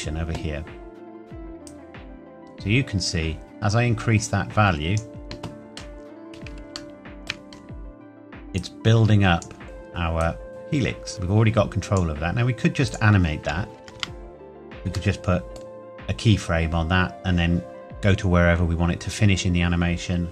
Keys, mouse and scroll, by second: 5.8-6.7 scroll up 1, 7.0 shift+middle click, 7.5-8.5 scroll up 1, 8.6 click, 9.6-10.2 scroll down 1, 10.2 click, 13.8 KP_0, 14.0 KP_Enter, 15.1 middle click, 16.1-17.9 scroll up 1.